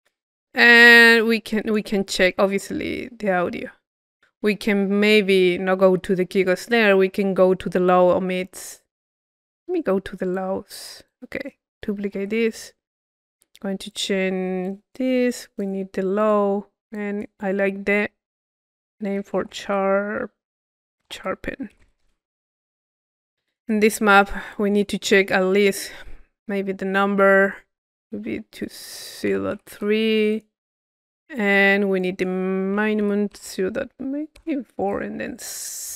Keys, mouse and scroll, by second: 1.5-2.6 drag, 3.4 middle click, 4.1 middle click, 4.6-6.2 middle drag, 9.8-11.1 middle drag, 10.4-12.2 drag, 12.2 c, 12.9 click, 13.9-15.6 drag, 15.7-18.3 drag, 23.1-25.8 drag, 28.6-30.1 drag, 30.9-32.0 middle drag, 32.0-35.8 drag.